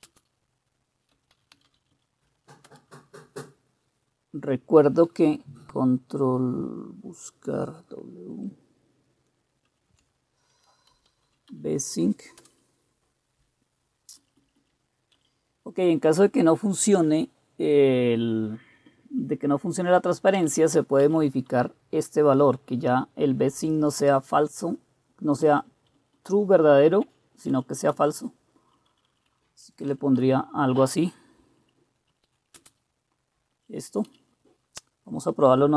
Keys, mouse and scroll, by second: 0.0-2.2 typing, 2.6 Return, 9.7 ctrl+w, 10.7-12.0 typing, 12.4 Return, 14.2 Down, 14.4 Down, 14.6 Down, 15.2 Up, 20.3 Up, 20.5 Up, 21.0 Down, 21.5 Left, 22.1 Left, 22.3 Left, 22.3 Left, 25.4 Down, 25.9 Right, 26.1-26.9 Right, 27.5 Up, 27.9-28.7 Left, 28.9 Left, 29.2 Left, 29.6 Delete, 29.8 Delete, 29.8 typing, 30.2 Down, 32.1-34.5 typing, 33.5 Up.